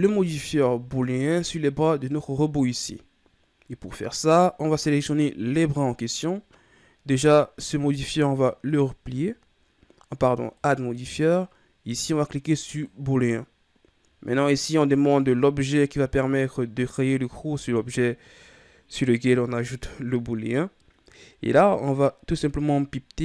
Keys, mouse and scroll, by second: 0.1 KP_3, 1.9 right click, 8.7-13.6 drag, 22.3 click.